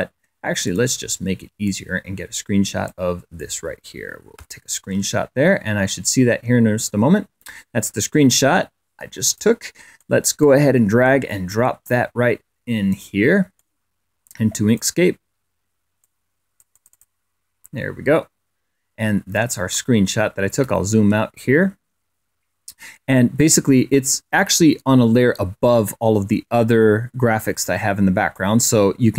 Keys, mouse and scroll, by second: 0.4 click, 1.4-2.9 drag, 3.1 click, 4.2 Print, 9.0 click, 9.8 click, 10.1 click, 11.6 click, 12.0 click, 13.8 click, 15.8-17.0 drag, 19.7-20.4 ctrl+scroll down 3, 20.8 ctrl+click, 28.1 click.